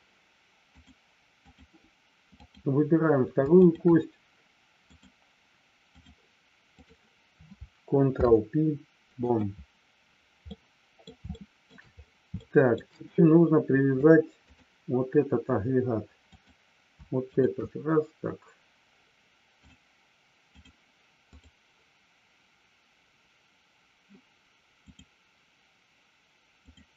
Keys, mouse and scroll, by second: 0.9 click, 2.2 click, 3.5 shift+click, 4.9-6.1 drag, 6.7 click, 8.0 ctrl+p, 10.6 middle click, 11.2 shift+middle click, 12.3 shift+middle click, 14.1 click, 16.2 click, 17.2 shift+click, 19.6-20.7 drag, 21.2 click, 24.9-26.9 drag.